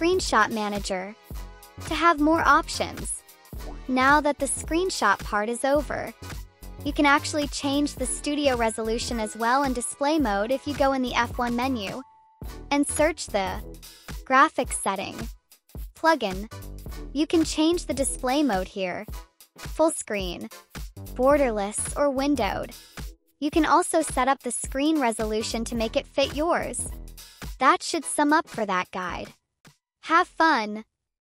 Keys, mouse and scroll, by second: 5.2 click, 6.4 F1, 14.2 click, 17.4 click, 18.7 click, 20.0-20.5 drag, 21.0 click, 21.5 click, 23.0 click, 23.9 drag, 24.5-25.5 typing, 25.1 drag, 25.7 click, 28.0-29.9 drag, 30.2 right click.